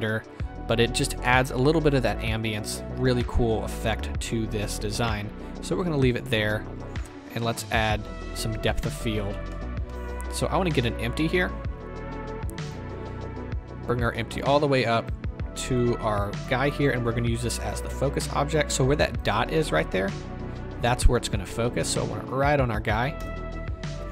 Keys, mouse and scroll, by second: 7.4 z, 9.2-12.7 middle drag, 9.9-10.5 scroll down 2, 10.5-11.8 scroll down 1, 11.8-12.7 scroll down 1, 14.1-19.7 drag, 19.3-19.7 scroll up 2, 19.4 middle click, 19.7 shift+middle drag, 19.9-20.6 scroll down 2, 20.6-21.1 scroll down 1, 21.1-24.1 drag, 23.2 KP_0.